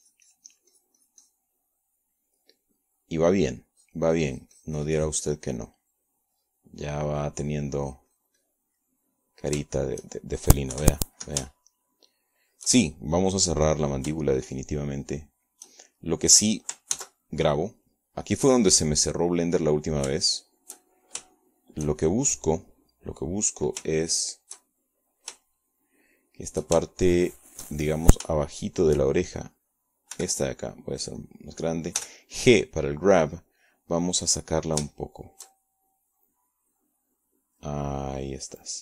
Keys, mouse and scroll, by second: 0.5-3.6 drag, 4.3 middle click, 5.9-7.6 drag, 7.7-9.6 middle drag, 9.8 click, 10.9-12.4 middle drag, 12.4 shift+click, 12.9 shift+KP_1, 13.6-14.8 shift+drag, 16.4 shift+click, 17.1 shift+click, 17.9 shift+click, 19.1 ctrl+s, 19.5 ctrl+click, 20.6 click, 21.7-24.0 drag, 24.2 shift+click, 25.9-30.3 shift+drag, 30.5 shift+click, 32.3 f, 33.3 click, 34.1 g, 34.7 click, 37.0-38.1 shift+drag, 38.6-38.8 drag.